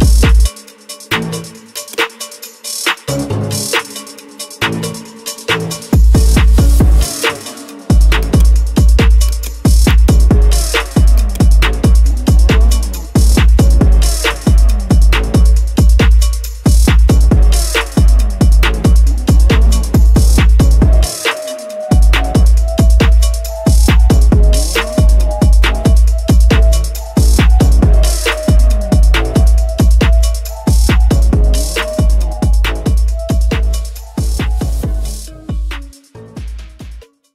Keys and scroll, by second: 0.0 Right, 6.5 space.